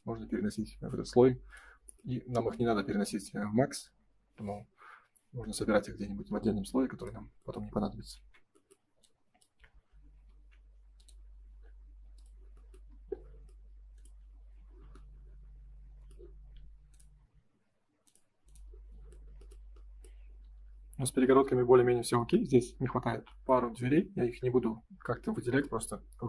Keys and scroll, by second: 8.1 ctrl+s, 10.1 m, 12.8 space, 14.3 ctrl+s, 21.0 ctrl+s.